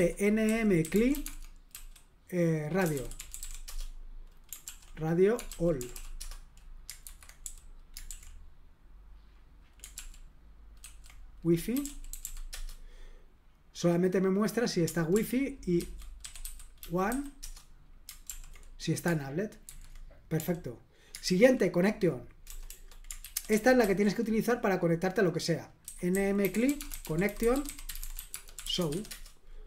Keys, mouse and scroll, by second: 0.0-4.1 typing, 4.6 ctrl+p, 5.2-7.4 typing, 7.0 super+h, 8.1 super+l, 9.9 ctrl+p, 10.8 ctrl+w, 11.5-12.7 typing, 15.1 ctrl+p, 15.8 ctrl+w, 16.0-17.6 typing, 18.3 ctrl+p, 19.6 super+h, 21.2 super+l, 22.4 BackSpace, 22.7 BackSpace, 23.2 ctrl+w, 23.5 ctrl+w, 23.8 ctrl+w, 25.6-29.4 typing.